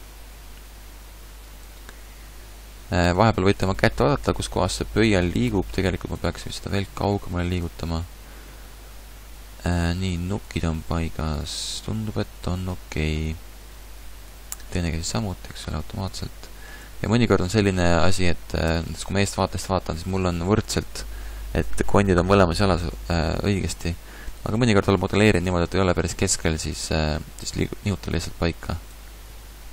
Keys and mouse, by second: 6.5 g, 9.8 g, 18.7 KP_1, 23.8 Tab, 29.3 ctrl+z.